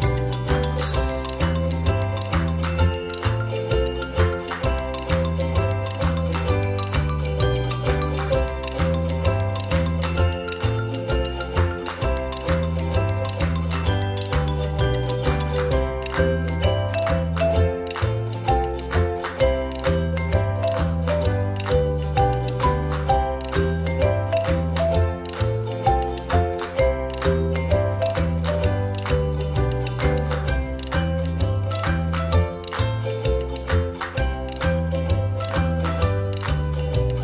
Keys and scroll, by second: 9.3 o, 11.8 ctrl+j, 18.6 space, 30.1 space, 31.8 space, 35.2 ctrl+z.